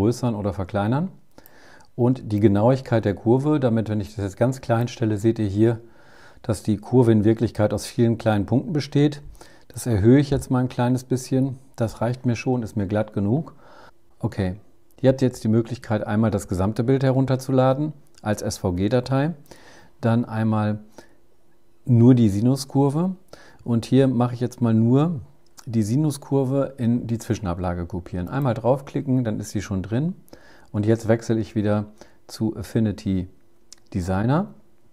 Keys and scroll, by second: 13.8 super+r, 33.0 super+Tab.